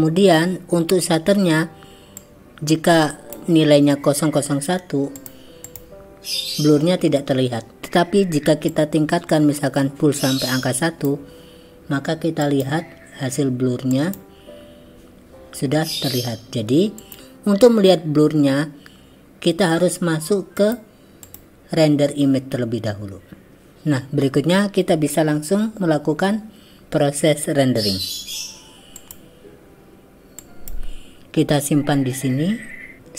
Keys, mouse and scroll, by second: 2.2-3.5 drag, 5.2-6.2 drag, 8.9-11.1 drag, 12.4 click, 20.8-21.8 drag, 29.0 click, 30.4 click.